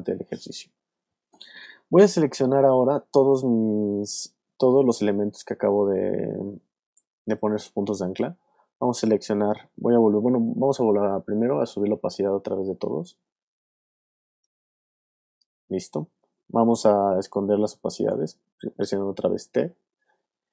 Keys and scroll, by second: 10.8 super+a, 18.1 t.